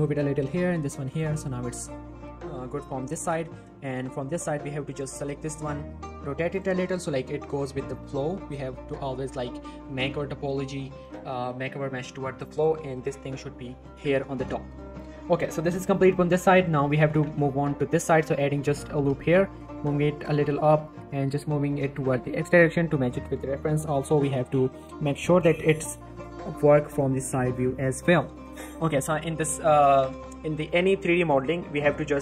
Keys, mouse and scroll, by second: 1.2 z, 1.5 scroll down 1, 1.6 middle click, 3.0 scroll up 1, 3.6 z, 3.7 shift+middle click, 3.9-4.3 shift+scroll up 1, 4.3-5.1 click, 5.2 shift+scroll down 1, 5.3 shift+middle click, 5.6 r, 6.5 click, 8.9 shift+middle click, 9.2 g, 10.1 click, 10.3 r, 11.0 click, 11.3 g, 12.5 click, 13.2 z, 13.4 scroll down 1, 13.7 middle click, 13.9 Tab, 14.1 scroll down 1, 14.2 middle click, 14.7 shift+middle click, 17.0 scroll up 1, 17.1 Tab, 17.2 z, 18.1 ctrl+r, 18.3 ctrl+click, 18.5 right click, 18.9 g, 19.2 z, 20.2 click, 20.5 g, 20.7 x, 21.9 click, 22.2 z, 22.4 Tab, 22.8 z, 24.1 Tab, 24.2 z, 24.4-25.0 scroll up 1, 25.2 click, 25.4 click, 25.5 g, 25.7 y, 26.9 click, 27.7 g, 27.8 y, 28.4 click, 29.2 s, 29.4 z, 30.7 middle click, 30.9 z, 31.1 Tab, 31.2 scroll down 1, 31.4 middle click, 31.7 Tab, 32.0 middle click, 32.1-32.2 scroll up 1.